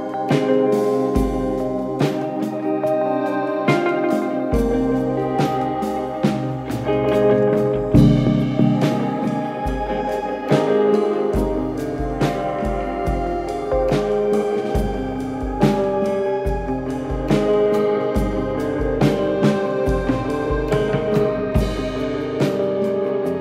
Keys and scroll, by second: 1.7 ctrl+z, 6.4 ], 6.6 ], 7.6 4, 9.0 3, 13.5 Delete.